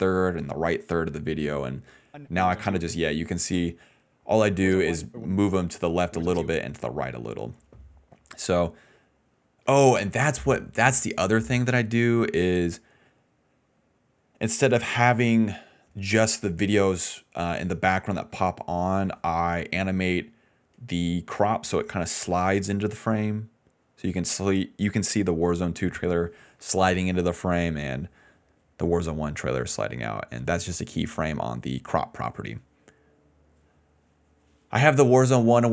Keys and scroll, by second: 2.0 space, 2.7 space, 4.5-6.4 typing.